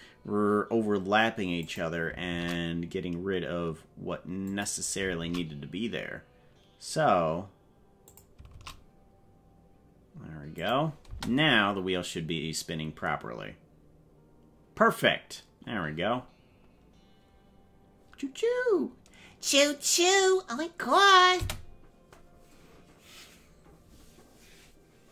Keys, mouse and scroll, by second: 2.3 shift+d, 5.3 shift+d, 8.5 shift+d, 11.0 space, 21.3 space.